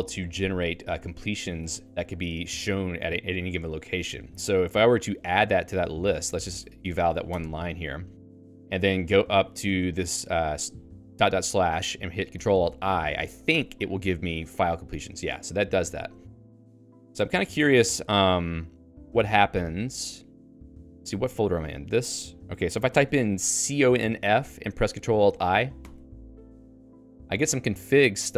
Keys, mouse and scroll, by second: 1.0 q, 1.6 Escape, 2.0-3.8 k, 3.8-5.4 j, 5.6 j, 6.0 shift+a, 6.8 ctrl+e, 7.3 Escape, 7.5-10.4 typing, 13.5 ctrl+alt+i, 14.8 Right, 15.6 BackSpace, 15.8 BackSpace, 16.8 BackSpace, 17.4 Up, 17.8 Return, 21.3 ctrl+f, 23.1 ctrl+g, 23.4-24.6 typing, 25.8 ctrl+alt+i.